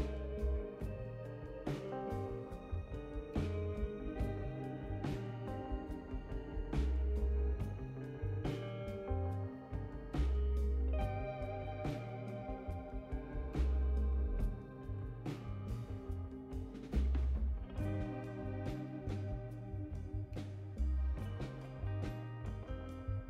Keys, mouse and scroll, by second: 2.9 click, 6.2 click, 10.4 0, 10.9 ,, 11.5 5, 14.0 click, 18.2 click, 21.7 right click.